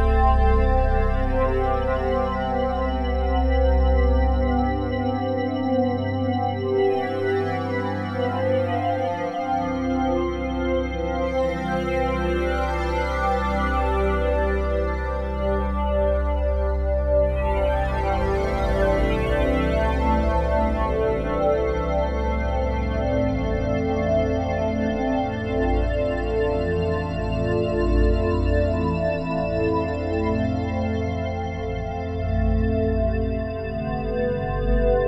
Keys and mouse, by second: 0.0 click, 0.9 click, 1.3 click, 2.8 space, 3.3-5.5 drag, 3.5 space, 5.5 space, 5.8-8.0 drag, 8.0 space, 9.1 ctrl+s, 12.5 alt+shift+click, 14.3 click, 15.8-23.4 drag, 23.4 typing, 23.7 Return, 24.3 click, 24.9 click, 25.7-26.3 typing, 26.6 Return, 27.2 click, 27.7 click, 28.5-28.8 typing, 29.2 Return, 30.3 ctrl+s, 31.0-33.6 drag, 31.2-32.0 typing, 33.6 space, 34.1 click, 34.4 space.